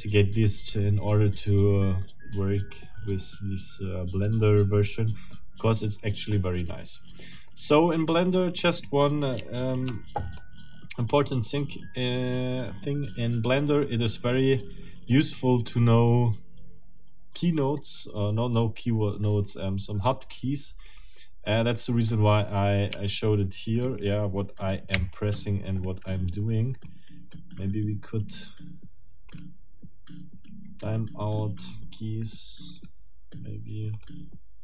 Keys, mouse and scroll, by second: 5.3-7.7 drag, 9.6 ctrl+z, 10.4-11.8 middle drag, 15.6 click, 19.1 click, 19.4 click, 20.7 click, 24.9 o, 25.8 right click, 26.8 click, 29.3 click, 31.6 click, 32.8 click, 34.0 click.